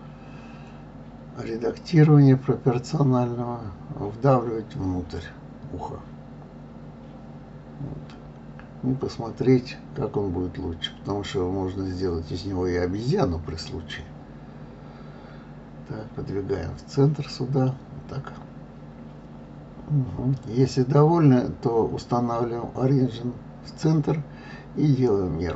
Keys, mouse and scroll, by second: 0.4 click, 0.6-1.7 middle drag, 1.7 click, 2.4 middle click, 2.5 click, 2.8-3.8 middle drag, 4.3 click, 5.7 KP_1, 5.9 click, 7.9 click, 9.3 g, 10.1 click, 12.4 click, 12.6-13.6 middle drag, 14.6 KP_3, 15.0 click, 15.9 g, 17.7 middle click, 18.6 click, 19.8-20.8 drag, 22.8 click, 23.9-24.9 middle drag, 25.3 middle click.